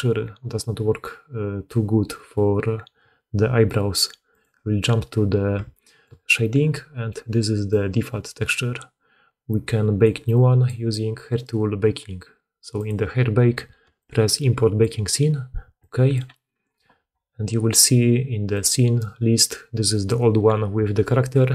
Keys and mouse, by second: 4.4-7.2 drag, 7.2 middle click, 7.2 click, 7.4 middle click, 7.6 middle click, 10.0-21.5 drag.